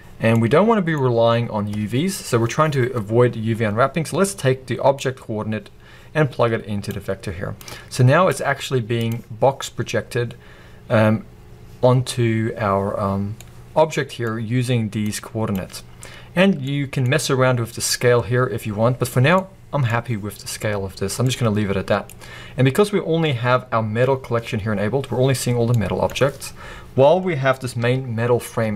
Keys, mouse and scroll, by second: 2.4-7.3 middle drag, 2.4-3.5 scroll up 2, 3.5-4.3 scroll up 1, 4.3-5.2 scroll up 1, 5.2-6.0 scroll up 1, 6.0-7.3 scroll up 1, 7.3-11.0 drag, 12.3-12.7 scroll up 1, 13.4-15.0 middle drag, 15.0 click, 16.0-16.7 scroll up 1, 20.2-28.7 middle drag, 20.4-21.0 scroll down 2, 21.0 scroll down 1, 22.2-22.7 scroll down 2, 22.7-23.5 scroll down 1, 23.5-24.4 scroll down 1, 24.4-25.2 scroll down 1, 25.2-25.8 scroll down 1, 26.9-27.7 scroll up 2, 27.7 scroll up 1, 27.9 g.